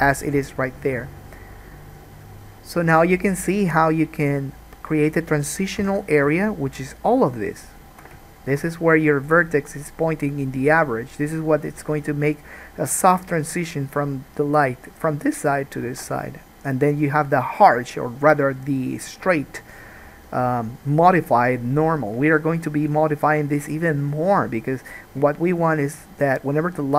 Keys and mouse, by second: 6.0 3, 6.1 click, 6.2-7.4 shift+middle drag, 7.4 shift+click, 7.5 shift+middle click, 7.9 shift+click, 8.1-26.9 shift+middle drag, 16.1 alt+a.